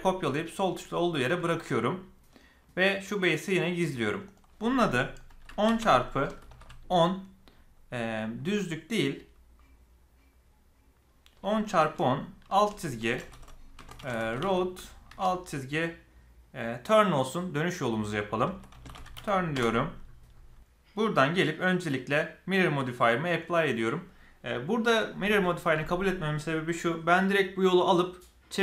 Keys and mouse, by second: 3.1 drag, 4.0 click, 12.1-20.3 shift+drag, 20.9 click, 22.8-23.3 drag.